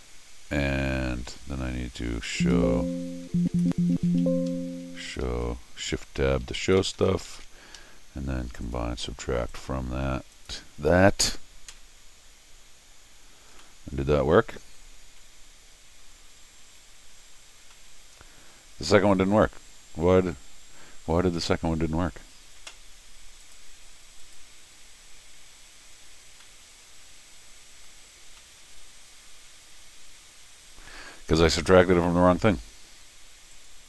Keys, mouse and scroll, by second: 2.3 shift+Tab, 3.3 shift+Tab, 3.5 shift+Tab, 3.7 shift+Tab, 4.0 shift+Tab, 4.2 Escape, 5.0 shift+Tab, 5.2 shift+Tab, 5.5 shift+Tab, 6.0 shift+Tab, 6.4 shift+Tab, 6.6 shift+Tab, 6.8 shift+Tab, 7.0 shift+Tab, 7.1 shift+Tab, 7.3 shift+Tab, 7.8 Escape, 8.6 click, 9.5 click, 10.3 click, 13.6 middle click, 15.1 Tab, 16.6 Tab, 17.6 scroll up 1, 17.7-21.0 middle drag, 21.4 middle click, 23.4 click, 24.2 click, 26.4-27.8 middle drag, 28.2 scroll down 1, 28.4-31.3 middle drag, 31.8 click, 33.5 click.